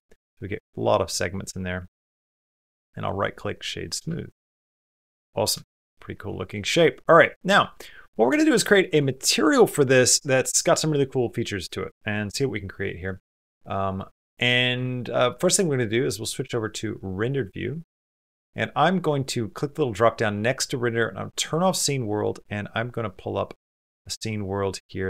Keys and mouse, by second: 0.0 middle click, 0.9 middle click, 1.4 middle click, 1.9 middle click, 2.3 right click, 3.6 middle click, 3.9 shift+middle click, 4.3-5.3 middle drag, 5.4-6.6 shift+middle drag, 7.0 middle click, 7.4 shift+middle click, 7.9 middle click, 8.2 shift+middle click, 8.5 ctrl+middle click, 8.8 shift+middle click, 12.7 shift+middle click, 13.0 middle click, 13.9 shift+middle click, 14.2 middle click, 16.9 click, 18.4-19.4 drag, 19.7-25.0 drag.